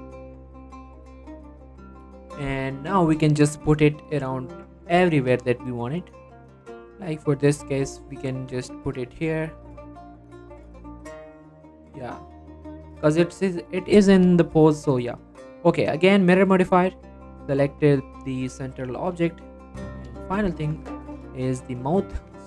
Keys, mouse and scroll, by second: 0.6 middle click, 0.8-1.2 scroll up 1, 1.2-1.6 scroll down 1, 2.8 scroll up 1, 3.7 f, 4.0 right click, 4.4-4.8 scroll down 1, 4.8 g, 5.1 x, 7.4 x, 8.1-8.8 scroll down 1, 8.8-9.4 scroll up 1, 9.4 scroll up 1, 9.5 g, 10.2 right click, 10.6 g, 11.2 click, 11.5-11.8 scroll down 2, 11.8 click, 12.1 middle click, 12.6 scroll up 1, 12.9 middle click, 13.3-13.7 scroll up 1, 13.7 middle click, 14.5 scroll down 1, 14.6 click, 18.2-18.8 scroll down 2, 18.4 click, 18.8 middle click, 19.0 shift+middle click, 19.2 scroll up 1, 19.3 middle click, 20.7 scroll up 1, 21.6 click, 22.2 Tab.